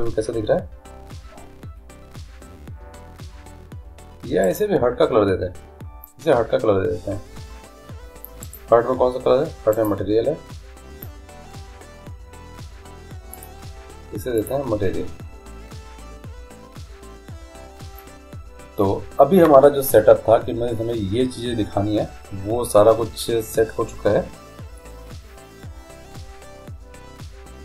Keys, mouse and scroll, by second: 4.7-6.4 right drag, 7.1-8.6 middle drag, 8.6-11.7 right drag, 13.5-15.3 drag.